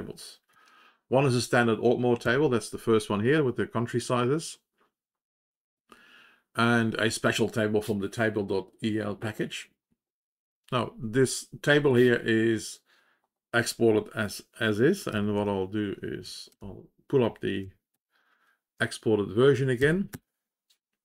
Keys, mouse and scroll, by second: 0.4 ctrl+l, 0.6 ctrl+l, 2.1-3.2 Down, 17.8 ctrl+j, 19.7 Up.